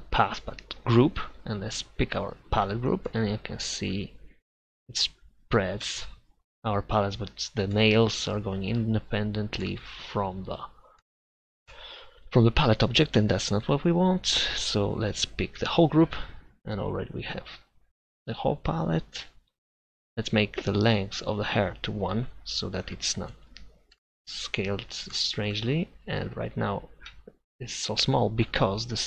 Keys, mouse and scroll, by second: 0.8-2.6 drag, 6.2 middle click, 15.5-16.6 middle drag, 16.6-23.2 drag, 23.2-28.8 middle drag.